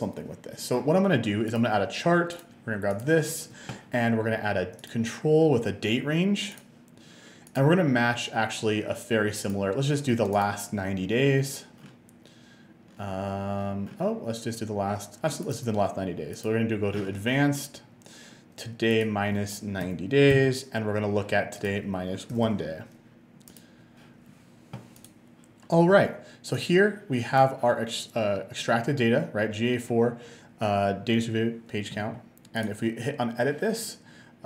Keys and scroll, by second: 19.8-20.9 typing, 22.4 BackSpace, 22.6 1.